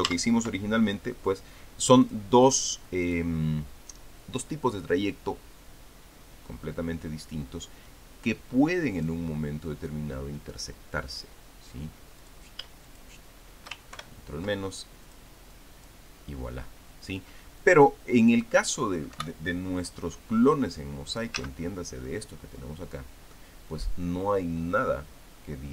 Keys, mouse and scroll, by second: 0.3 ctrl+z, 2.1 click, 2.8-3.4 drag, 3.9 click, 9.8 click, 10.7-12.4 drag, 13.0 click, 13.7 shift+click, 15.8 click, 16.3 click, 18.4 click, 19.9 Delete, 21.3 click, 22.1 ctrl+z, 22.8-24.2 middle drag.